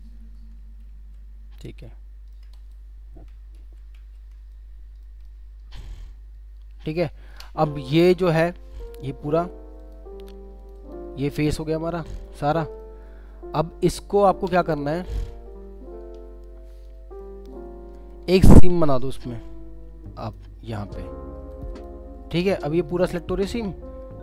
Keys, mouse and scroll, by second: 0.8 typing, 1.8 alt+middle click, 3.5 typing, 8.8 double click, 11.6 alt+middle click, 12.4 alt+scroll up 2, 12.8 alt+middle click, 17.2 alt+middle click, 21.7 double click, 24.0-24.2 scroll down 1.